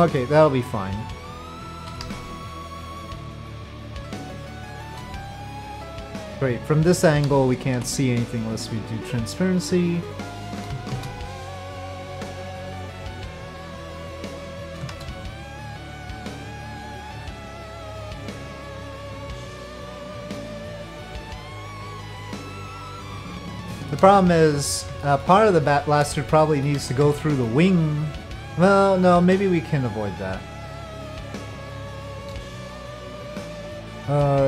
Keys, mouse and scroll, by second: 1.9 KP_5, 2.0 KP_1, 4.6 shift+middle drag, 7.2 z, 10.9 shift+d, 12.2-14.2 drag, 14.9 shift+d, 16.1 click, 23.6 shift+drag, 25.0 shift+middle click, 25.4 shift+click, 26.0 middle click, 26.8 z, 27.4-31.6 middle drag, 31.9-32.2 shift+middle drag, 33.1-34.2 middle drag.